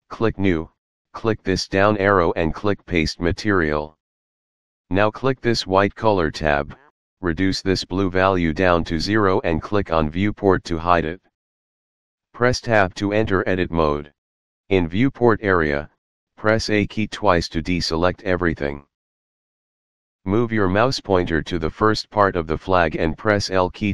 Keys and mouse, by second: 0.6 click, 1.8 click, 3.0 click, 5.8 click, 6.9 click, 9.0 click, 11.5 click, 13.0 Tab, 17.0 a.